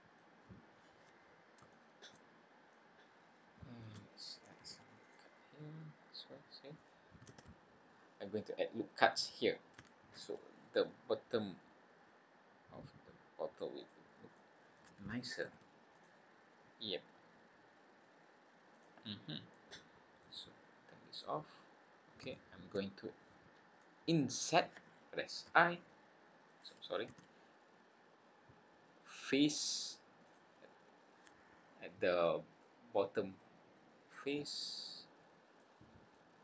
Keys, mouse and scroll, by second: 0.5 scroll down 3, 1.1-1.5 scroll up 3, 1.7 shift+middle click, 2.2-2.7 scroll up 3, 2.7 middle click, 4.6 ctrl+r, 7.3 ctrl+z, 7.9 scroll down 2, 10.1 ctrl+r, 14.3 middle click, 15.4 ctrl+r, 19.0-19.5 scroll down 4, 19.5 middle click, 21.1 click, 21.6-22.0 scroll up 3, 22.3 shift+middle click, 22.9 scroll up 2, 23.4 scroll up 1, 23.8 middle click, 25.5 i, 27.1 ctrl+z, 28.1 scroll down 2, 29.6 click, 30.2 click, 31.1 scroll up 1, 31.7-32.5 scroll down 6, 32.6 middle click, 34.4-35.0 scroll up 5, 35.5 middle click.